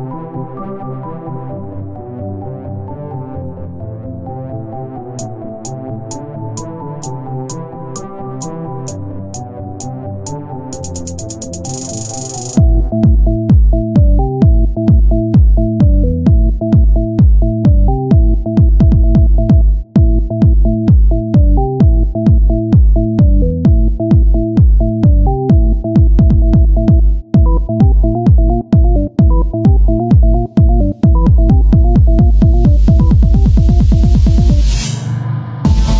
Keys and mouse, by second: 2.6 z, 5.8 Tab, 7.2 KP_1, 7.6 z, 9.1 ctrl+r, 12.7 c, 13.3 click, 13.7 shift+d, 15.9 click, 16.5 r, 19.8 p, 20.5 Tab, 21.1 z, 21.7 Tab, 22.5 ctrl+Tab, 25.3 f, 25.7 KP_1, 26.1 z, 27.9-31.3 drag, 29.9 e, 32.0-34.6 drag, 33.8 r, 34.6 e.